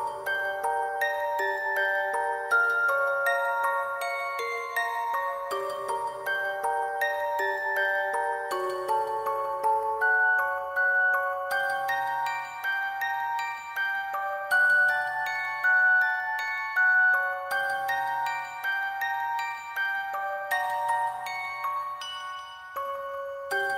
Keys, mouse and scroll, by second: 15.6 shift+click, 15.8 alt+click, 16.8 alt+click.